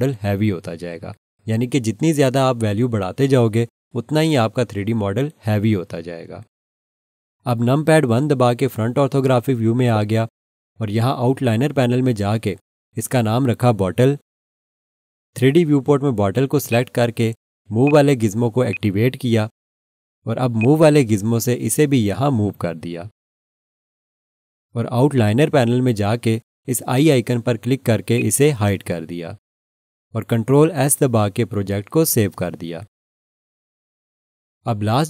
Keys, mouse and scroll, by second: 8.6 1, 9.7 scroll down 1, 12.7 F2, 13.8-15.1 typing, 16.7 click, 28.2 click, 31.4 ctrl+s.